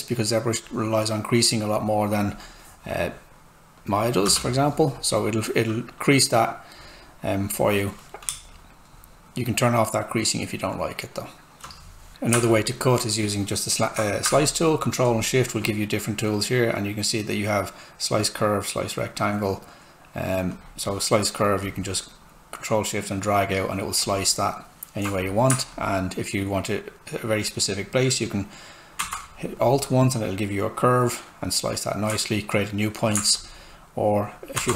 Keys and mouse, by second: 4.2 Return, 8.3 space, 9.4 space, 12.1 click.